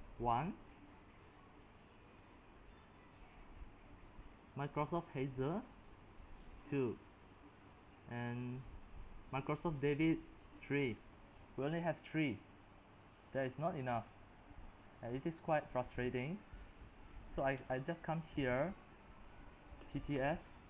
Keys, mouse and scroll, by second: 3.6-8.3 drag, 8.9-13.9 drag, 14.8-19.8 drag, 19.6-20.6 typing.